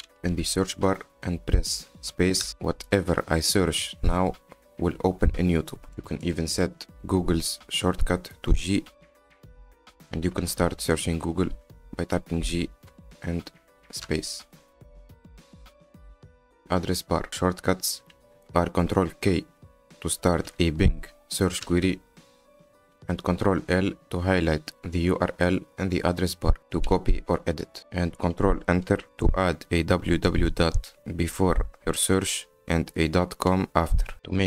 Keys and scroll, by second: 1.9 y, 2.2 t, 2.7 space, 4.4-5.7 typing, 6.0 Return, 7.9 BackSpace, 8.0 Caps_Lock, 8.5 g, 12.6 g, 13.7 space, 16.6 BackSpace, 22.1 ctrl+k, 23.8 ctrl+l, 29.6 ctrl+Return.